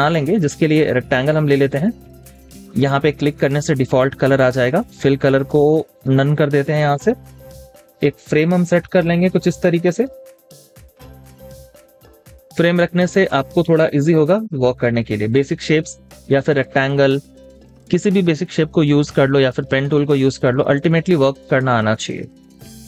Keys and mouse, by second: 15.9 space, 20.3 z.